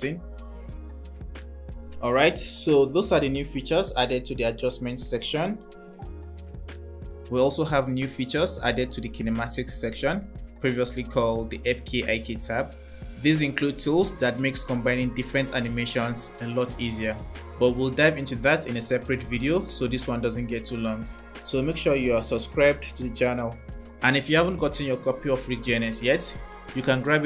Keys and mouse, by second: 3.4 space, 4.8 click, 6.3 click, 7.2 click, 16.8 click, 19.5 click, 23.8 click.